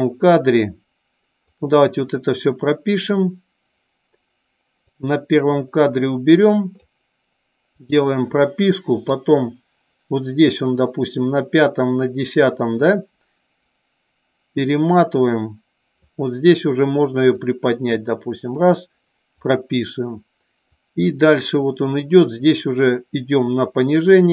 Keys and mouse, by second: 1.6 click, 4.9 click, 7.9 click, 9.3-16.2 drag, 17.6 click, 19.5 click, 20.8 click, 23.7 click.